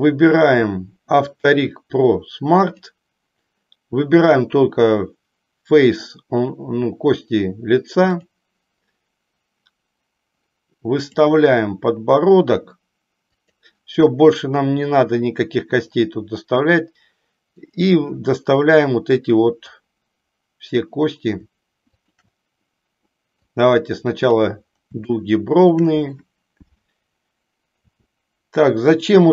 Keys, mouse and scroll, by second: 2.7-8.4 drag, 11.1-11.6 drag, 13.3 click, 17.6 click, 19.7-20.9 drag, 22.0 shift+click, 23.4-24.5 drag, 25.1 shift+middle click, 28.0 s, 29.0 click.